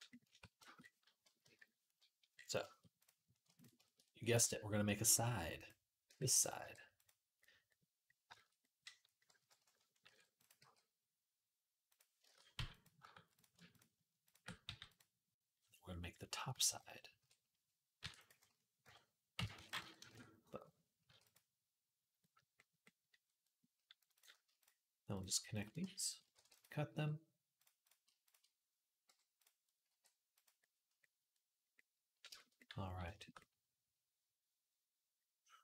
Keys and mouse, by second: 0.1 Tab, 1.2 KP_3, 2.8 click, 3.3 click, 4.1 e, 5.8 g, 6.4 r, 9.2 KP_3, 9.8 ctrl+r, 10.4 g, 12.0 shift+Tab, 12.3 g, 13.6 ctrl+click, 14.4 g, 16.5 ctrl+KP_7, 17.0 KP_7, 17.0-24.4 middle drag, 17.8 e, 18.6 ., 19.3 s, 20.9 g, 24.4 shift+click, 24.5 shift+middle click, 24.9 shift+click, 25.0-35.6 shift+middle drag, 25.6 f, 26.1 ctrl+r, 26.7 g, 28.9 m, 29.7 g.